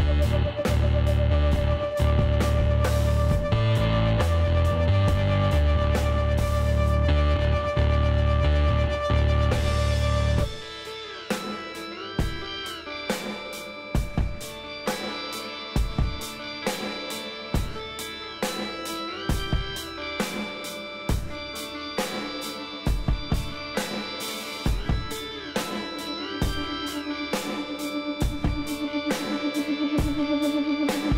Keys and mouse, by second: 1.7 KP_Divide, 2.0-4.8 middle drag, 3.6 KP_Decimal, 4.9 z, 5.3-7.1 middle drag, 9.0 x, 12.1-15.2 drag, 14.2 s, 15.6 KP_1, 16.3 middle click, 18.6 s, 21.6 e, 23.0-24.9 drag, 26.8 e, 29.6 e.